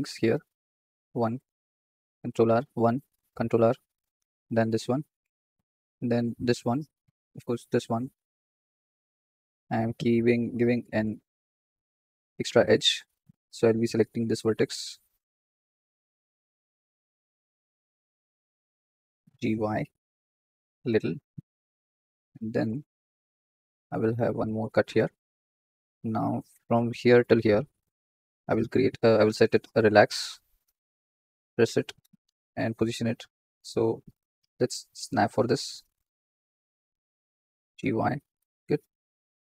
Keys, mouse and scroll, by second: 3.2 ctrl+r, 4.5 ctrl+r, 5.8 ctrl+r, 7.2 ctrl+r, 8.4 ctrl+r, 9.9 ctrl+r, 11.5 ctrl+r, 13.0 1, 13.6 click, 14.2 shift+click, 14.6 shift+click, 15.7 shift+click, 16.1 shift+click, 16.7 ctrl+z, 17.0 shift+click, 17.5 shift+click, 18.4 shift+click, 19.0 g, 24.2 ctrl+r, 26.6 click, 28.2-30.2 right drag, 31.9 g, 33.6-35.4 drag, 35.7 scroll down 1, 35.7 shift+middle click, 36.0-36.7 scroll up 4, 36.7 shift+middle click, 37.5 g, 38.8 click.